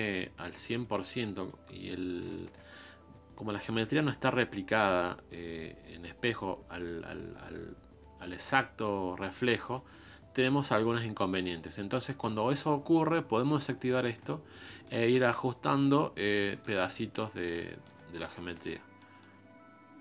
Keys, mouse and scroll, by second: 0.1-1.2 scroll up 2, 1.2 middle click, 1.6-2.1 scroll down 1, 2.4 KP_1, 7.3-7.6 scroll up 3, 8.2 shift+middle click, 8.8-9.5 scroll up 2, 9.5-13.6 shift+middle drag, 13.6-15.0 drag, 15.0 ctrl+z, 15.2 scroll up 2, 15.4 shift+middle click, 16.0-20.0 ctrl+drag.